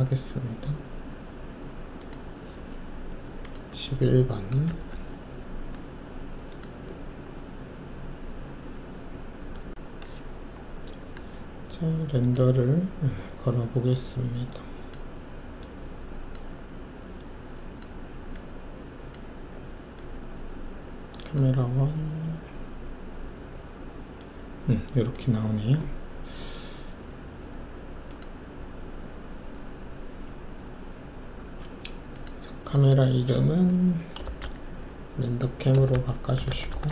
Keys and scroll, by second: 4.6 Delete, 4.8 typing, 34.2 shift+r, 34.4 shift+e, 35.7-36.1 typing.